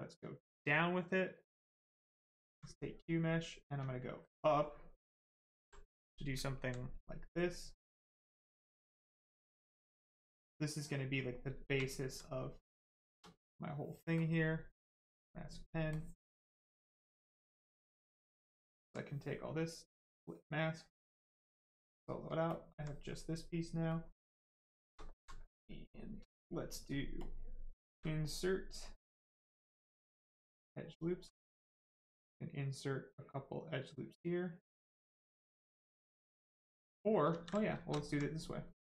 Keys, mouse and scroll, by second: 1.3 right click, 1.9 alt+click, 2.6 right click, 2.7 right click, 3.6 click, 3.7 ctrl+click, 6.4 alt+right click, 7.1 right click, 7.1 right click, 9.1 click, 11.8 alt+right click, 12.2 right click, 12.3 right click, 12.9 shift+right click, 14.1 ctrl+click, 15.0 ctrl+click, 15.9 ctrl+click, 18.7 alt+right click, 19.7 click, 21.3 click, 23.9 click, 24.5 right click, 24.7 shift+right click, 25.0 alt+right click, 26.2 right click, 26.3 space, 27.1 click, 27.2 space, 28.8 click, 30.0 right click, 31.2 space, 31.8 click, 37.3 ctrl+z, 37.5 right click, 37.7 shift+right click, 37.9 alt+right click, 38.3 right click.